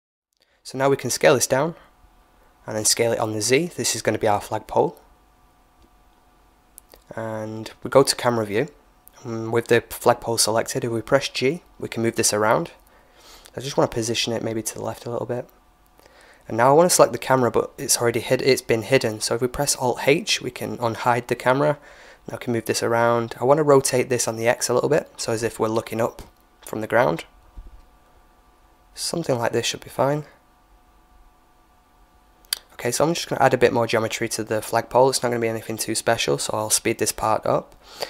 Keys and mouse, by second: 1.9 s, 5.0-7.3 middle drag, 6.5 KP_0, 8.9-11.3 middle drag, 11.8 g, 16.7 right click, 19.1 alt+h, 20.0 right click, 21.2 r, 23.6 g, 25.5 g, 27.5 g, 28.9 g, 30.1 r, 30.6 g, 31.1 middle click, 31.7 KP_1, 32.3 h, 32.5 right click, 33.1 middle click, 33.3 Tab, 33.9 click, 34.1 right click, 34.6 middle click, 35.3 space.